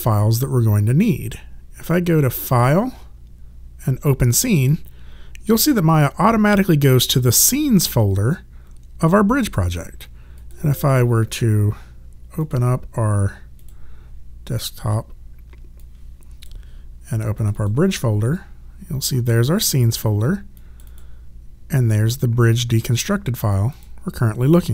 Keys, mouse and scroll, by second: 2.5 click, 10.4 click, 13.4 click, 15.8 click, 20.6 click, 23.7 click.